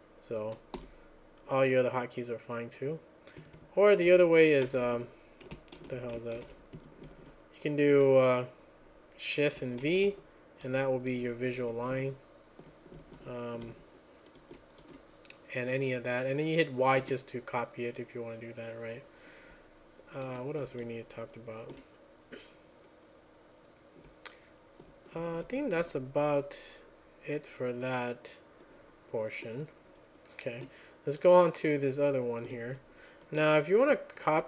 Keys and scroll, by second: 0.8 0, 3.6 Escape, 4.1 k, 4.7 Escape, 5.8 ctrl+c, 6.4 ctrl+a, 6.8 Escape, 7.1 k, 7.3 k, 7.8 k, 7.9 k, 9.6-14.8 typing, 17.0 typing, 20.8 alt+j, 21.3-22.1 typing, 23.8-26.3 typing, 30.5 typing, 31.8-34.3 typing.